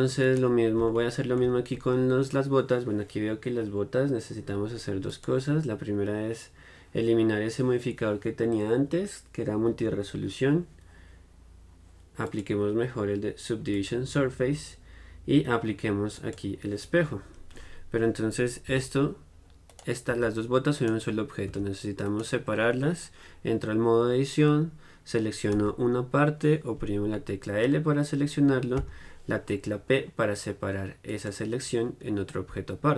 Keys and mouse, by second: 5.2-18.9 drag, 20.3 g, 21.0-23.8 drag, 21.7 Tab, 23.8-24.9 right drag, 28.9 p.